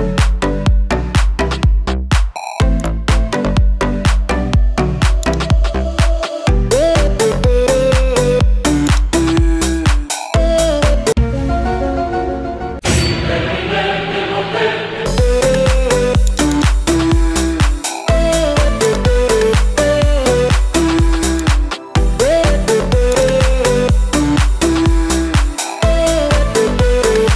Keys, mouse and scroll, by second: 2.7 click, 5.3 click, 8.9-11.1 drag, 10.6 KP_9, 11.0 KP_9, 15.0-19.0 drag, 15.0 KP_9, 21.4-23.4 drag.